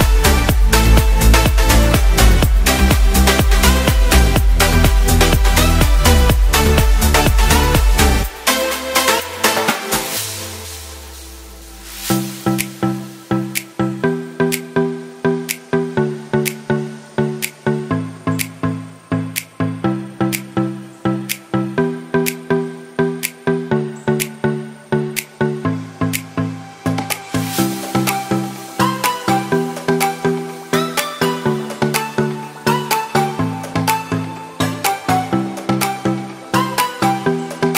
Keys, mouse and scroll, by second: 0.7 middle click, 4.0 shift+middle click, 4.6 middle click, 6.1-6.8 scroll down 8, 6.8 middle click, 7.2 alt+a, 7.6 middle click, 8.2 shift+middle click, 10.1 click, 12.5 scroll down 3, 12.7 shift+middle click, 13.8 middle click, 15.1 shift+middle click, 15.4 middle click, 15.9 shift+middle click, 16.6 click, 21.4 Tab, 21.9 middle click, 22.4 shift+middle click, 23.4 3, 23.9 scroll up 2, 24.0 shift+middle click, 24.6 alt+a, 24.9 middle click, 27.9 click, 28.5 shift+click, 28.9 shift+click, 32.6 c.